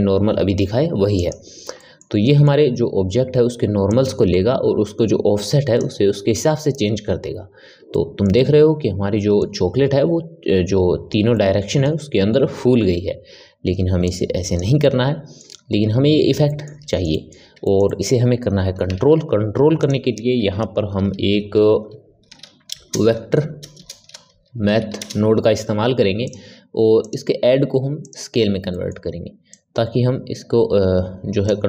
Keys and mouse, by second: 1.7-3.8 middle drag, 3.8-6.8 drag, 7.8-14.0 ctrl+middle drag, 14.0 click, 14.7-18.8 middle drag, 18.8 shift+a, 26.9-28.6 drag, 28.6 middle click, 29.4-31.6 drag.